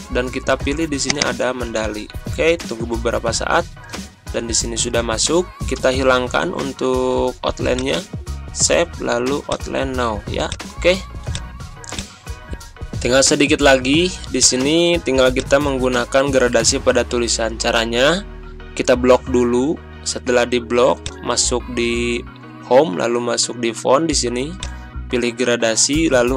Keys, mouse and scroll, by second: 7.7 click, 19.1 click, 21.0 click, 24.5-26.3 drag.